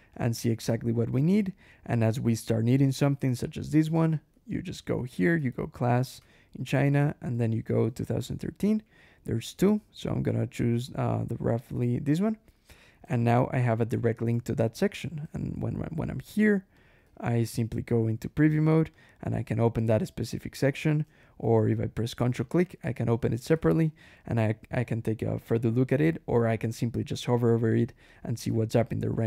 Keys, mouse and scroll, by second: 0.0 click, 0.5 click, 1.2 click, 3.5 click, 3.8 Escape, 4.0-6.1 typing, 4.2 Return, 7.2-8.6 typing, 12.0 click, 12.5 click, 12.9 Escape, 13.2 k, 13.9 click, 14.3 ctrl+w, 15.1 Escape, 15.4 d, 16.6 click, 16.9 d, 17.7 ctrl+e, 18.8 click, 20.6 alt+h, 22.3 ctrl+shift+click, 23.4 ctrl+shift+h, 27.9 click, 28.3-29.2 typing.